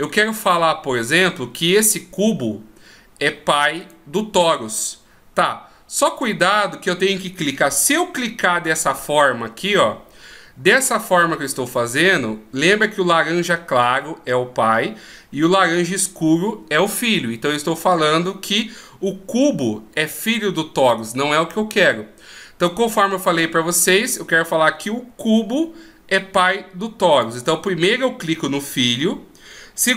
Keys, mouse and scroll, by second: 3.8 right click, 6.5 right click, 8.5 shift+right click, 9.6 shift+right click, 22.6 right click, 27.1 right click.